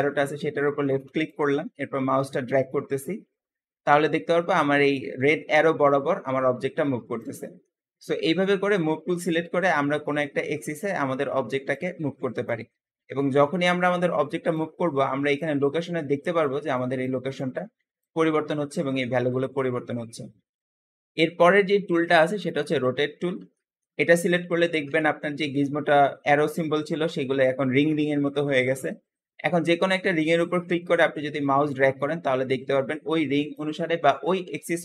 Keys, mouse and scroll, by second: 1.1 middle click, 1.1 click, 7.5-10.1 middle drag, 10.1 click, 12.3 click, 22.2-23.4 drag, 23.4-24.4 shift+middle drag, 24.4-24.8 scroll up 4, 24.8-27.9 shift+middle drag, 29.9 click.